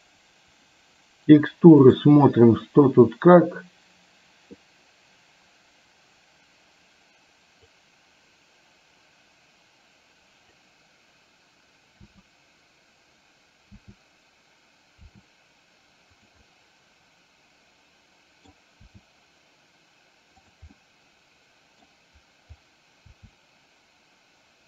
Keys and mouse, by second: 3.1-4.5 drag, 7.9-10.6 drag, 12.0 e, 13.8 e, 15.3 r, 16.5-18.6 middle drag, 18.9 r, 20.8-21.9 middle drag, 23.1 r.